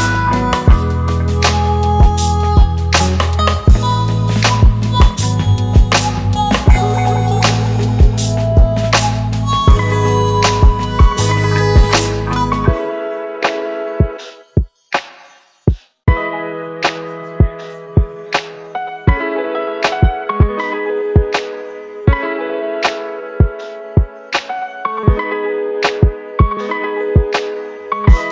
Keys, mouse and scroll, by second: 2.9 alt+click, 4.5 right click, 7.9-9.1 typing, 10.7 typing, 21.6 right click, 22.8-24.0 typing, 24.7 double click, 25.6 typing, 26.0 double click.